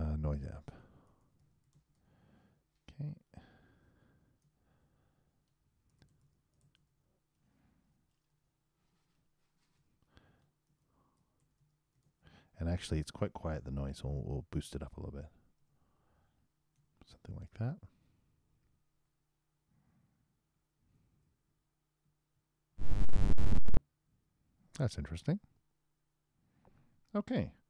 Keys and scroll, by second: 17.2 super+8, 17.9 super+Return, 21.1 super+Return, 22.7 super+Return.